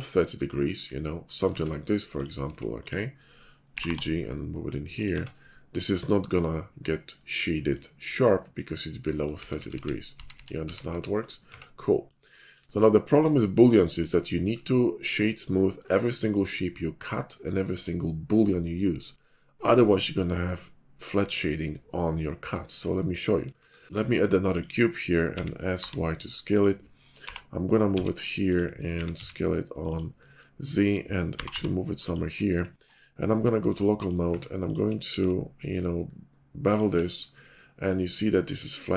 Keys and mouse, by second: 1.5 Tab, 2.5 Tab, 2.7 middle click, 3.7 g, 3.9-5.1 drag, 5.1 Tab, 9.3 ctrl+z, 9.5 ctrl+z, 9.7 ctrl+z, 10.1 ctrl+z, 10.3 ctrl+z, 10.7 ctrl+z, 10.8 ctrl+z, 11.4 Tab, 12.3 shift+middle drag, 23.6 shift+a, 25.2 s, 27.2 g, 28.8 s, 31.4 g, 32.8 /, 34.2 Tab, 35.1 ctrl+b, 36.8 Tab.